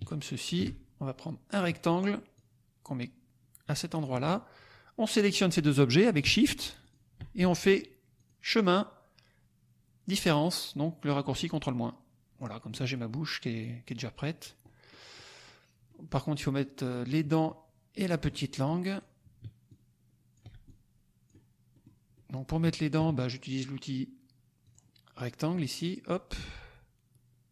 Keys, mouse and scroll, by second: 1.5 click, 2.3-4.2 drag, 5.1 click, 6.9 shift+click, 8.1 click, 11.5 click, 12.3 click, 12.8 click, 13.5-14.5 drag, 14.6 middle click, 15.1 click, 15.8-17.6 drag, 17.9 right click, 18.4 middle click, 18.6 click, 19.6 ctrl+click, 20.6 ctrl+click, 21.8 middle click, 21.8-22.5 scroll up 2, 22.1 middle click, 22.5 click, 24.6 click, 25.6-27.5 drag.